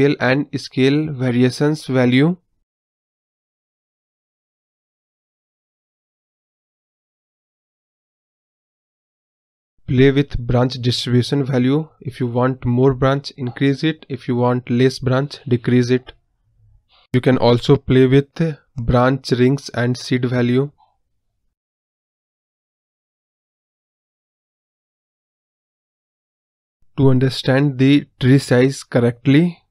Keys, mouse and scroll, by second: 0.0-1.2 scroll down 1, 1.2-3.5 drag, 5.8-7.3 drag, 12.0-13.5 drag, 16.8-18.4 drag, 19.0-20.6 drag, 21.2-25.5 drag, 26.7-28.9 drag.